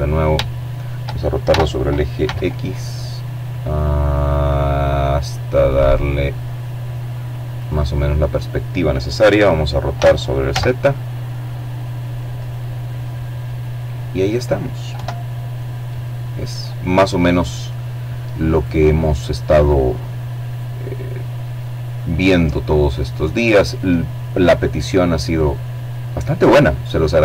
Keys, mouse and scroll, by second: 5.0 click, 7.4 r, 8.0 z, 9.8 click, 10.6-12.4 middle drag, 12.4 KP_7, 15.9 right click, 17.0 right click, 17.9 right click.